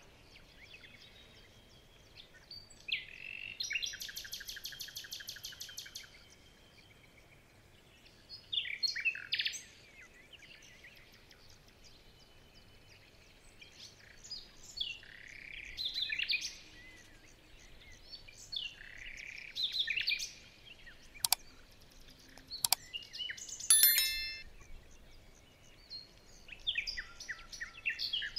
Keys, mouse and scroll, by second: 13.4-13.8 alt+scroll up 6, 13.8 alt+scroll down 2, 13.9 alt+scroll up 1, 15.3-15.7 alt+scroll down 1, 15.9 alt+scroll down 5, 16.1-17.2 alt+scroll up 9, 17.3-18.2 alt+scroll down 10, 19.1-19.4 alt+scroll up 1, 20.0 alt+scroll down 1, 20.2-21.2 alt+scroll up 1, 22.1 alt+scroll down 3, 22.3 alt+scroll up 2, 23.1 alt+scroll up 1, 24.6-25.0 alt+scroll down 3, 25.0-26.0 alt+scroll up 3, 25.2 ctrl+z.